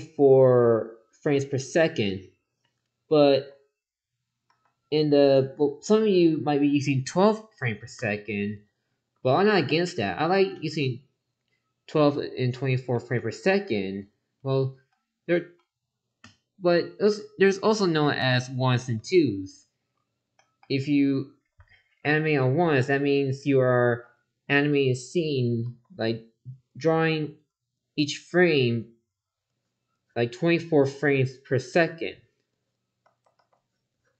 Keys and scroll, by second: 3.3 ctrl+z, 22.9 ctrl+z, 25.6 ctrl+z, 27.1 ctrl+z, 33.0 ctrl+z.